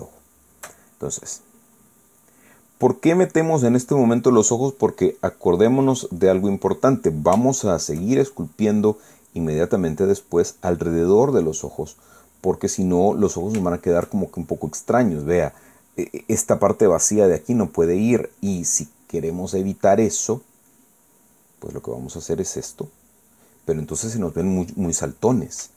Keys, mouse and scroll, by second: 0.4 shift+middle click, 1.2 shift+scroll up 1, 1.3 shift+middle click, 3.2-5.7 drag, 6.0 click, 7.2 middle click, 8.4-9.8 shift+middle drag, 10.9-13.7 drag, 13.8 middle click, 14.7-16.0 shift+middle drag, 16.6 middle click, 18.1-19.8 middle drag, 19.9-21.8 middle drag, 22.5-23.8 drag, 23.9-25.5 middle drag.